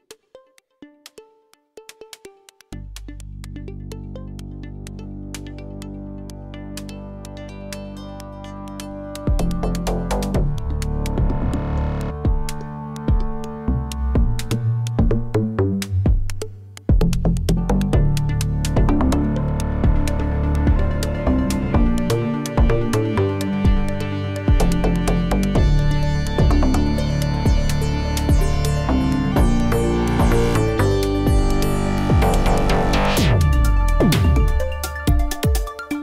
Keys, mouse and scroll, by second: 0.5 click, 1.6 shift+click, 1.8-2.2 scroll down 2, 2.2-3.3 shift+middle drag, 3.3 g, 5.6-6.1 middle drag, 6.1 Tab, 6.3-6.6 scroll down 4, 6.6-11.0 middle drag, 11.0 scroll down 1, 11.1-14.1 middle drag, 14.1 click, 14.5-16.4 scroll up 6, 15.1 shift+middle drag, 16.4-17.4 middle drag, 17.4 ctrl+r, 18.2 shift+middle click, 18.5 click, 19.1 3, 19.7 click, 19.9 g, 22.2 g, 24.0 Tab, 24.0-24.3 scroll down 5, 24.3-26.1 middle drag, 26.1 click, 26.4 Tab, 26.9 click, 27.7 2, 27.8 click, 28.0 middle drag, 28.3 g, 29.8 g, 31.4 g, 32.3 Tab, 32.4-32.8 scroll down 5, 32.8-34.9 middle drag, 34.9-35.3 scroll up 5, 35.3-35.7 shift+middle drag, 35.7 click.